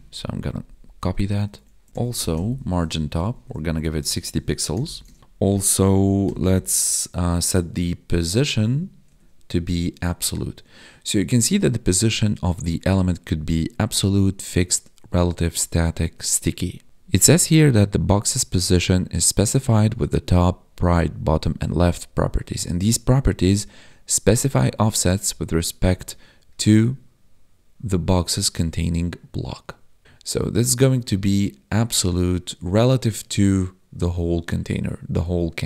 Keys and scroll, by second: 1.0 Right, 1.1 Down, 1.4 Left, 3.0 Down, 3.3 Tab, 5.1 ctrl+s, 8.6 Down, 9.1 Tab.